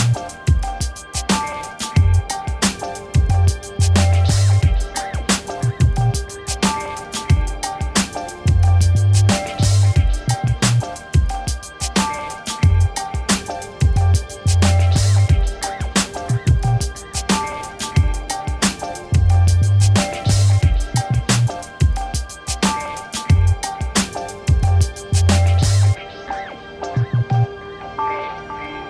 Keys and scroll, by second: 5.8 Return, 11.3 ctrl++, 14.4-17.4 typing.